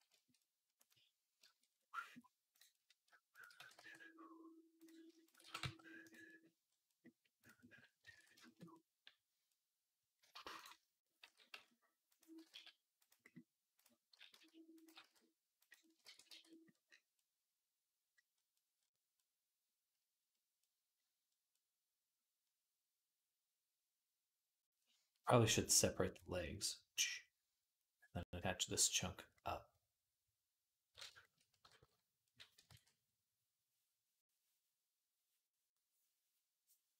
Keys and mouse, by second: 0.8-2.4 middle drag, 2.4 right click, 2.9 shift+click, 3.2 shift+middle click, 3.2 shift+right click, 3.4 g, 4.9 shift+click, 5.3 g, 6.1-7.5 right drag, 7.5-9.7 ctrl+drag, 8.0 ctrl+s, 11.1 s, 11.9-19.8 drag, 12.2 g, 13.9 s, 14.7 g, 15.9 ctrl+a, 19.8-22.6 middle drag, 22.6-29.7 drag, 29.7-32.4 middle drag, 32.4 ctrl+click, 32.5 ctrl+s, 32.5-36.9 middle drag.